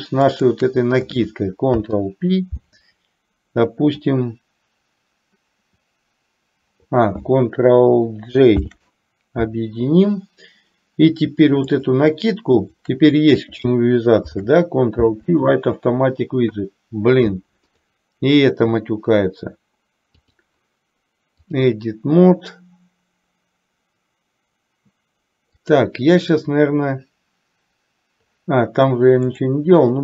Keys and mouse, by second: 0.4 shift+click, 1.8 ctrl+p, 8.7 ctrl+j, 11.7 click, 14.3 ctrl+p, 17.9 click, 20.3-21.9 drag, 25.7 click, 29.3 click.